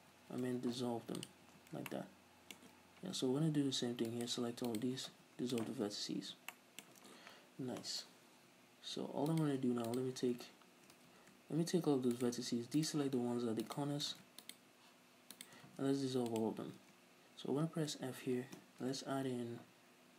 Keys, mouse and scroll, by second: 0.2 ctrl+z, 0.6 x, 1.6 a, 4.2 right click, 4.8 ctrl+right click, 5.2 x, 5.9 a, 6.6-9.4 shift+middle drag, 9.4 right click, 10.0 shift+right click, 11.1 a, 12.3 shift+right click, 12.9 shift+right click, 13.8 shift+right click, 14.3 ctrl+z, 14.6 shift+right click, 15.5 shift+right click, 15.8 x, 17.1 a, 18.0 f, 19.0 ctrl+r.